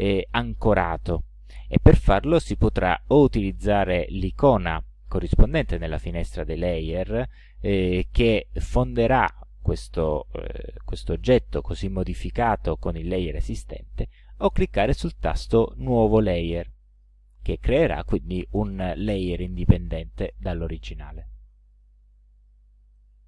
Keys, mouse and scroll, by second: 17.0 click, 21.0 click, 21.7 click, 23.0 click.